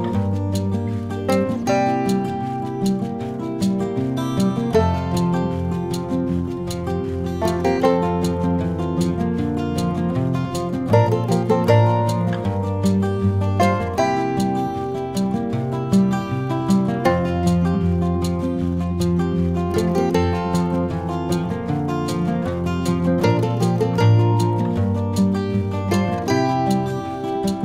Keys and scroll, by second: 14.1 ctrl+KP_Add, 21.8 ctrl+z, 24.0 ctrl+-, 24.8 ctrl+-, 25.6 ctrl+c, 25.8 ctrl+f, 27.2 ctrl+c, 27.3 ctrl+f.